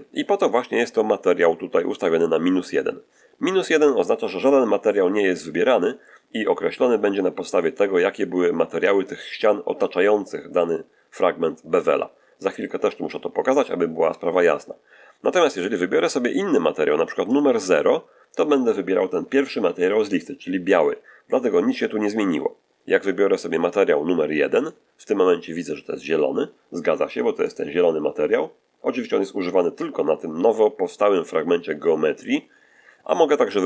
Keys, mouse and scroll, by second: 17.2 click, 24.5 click, 27.3 click.